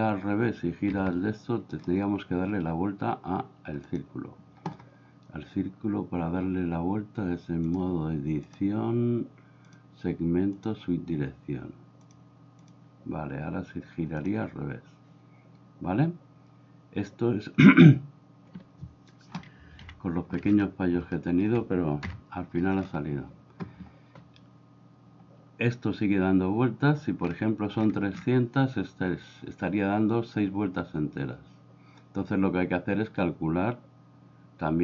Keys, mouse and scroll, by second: 0.9 Escape, 3.9 click, 7.7 click, 9.8 click, 12.1 click, 14.2 click, 19.9 KP_1, 21.2 shift+middle click, 22.1 KP_0.